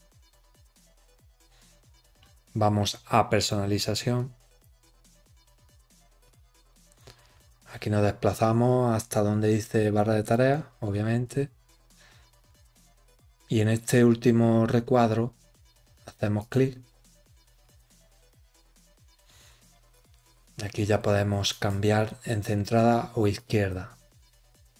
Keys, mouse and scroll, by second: 4.1 click, 7.0-7.7 scroll down 9, 10.2 click, 11.9-12.7 scroll down 6, 16.3 click, 17.5 scroll down 4, 21.4 click, 23.2 click.